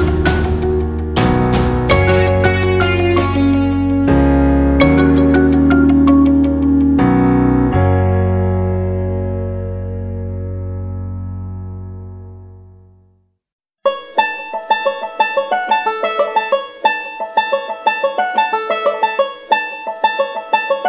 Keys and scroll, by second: 5.4 space, 8.2 space.